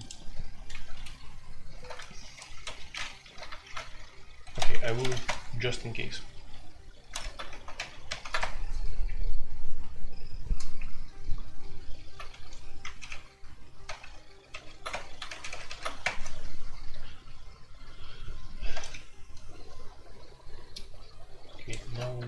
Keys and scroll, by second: 1.1 shift+k, 1.6 shift+k, 2.6 l, 3.2 super+k, 3.6 alt+2, 4.4-5.3 typing, 7.0 ctrl+c, 7.2 alt+o, 7.5 alt+p, 7.7 alt+p, 8.0 alt+p, 8.3 Return, 12.4 0, 12.9 alt+p, 13.8 alt+p, 14.5 alt+p, 14.9 Return, 15.2 alt+p, 15.4 alt+p, 16.0 Return.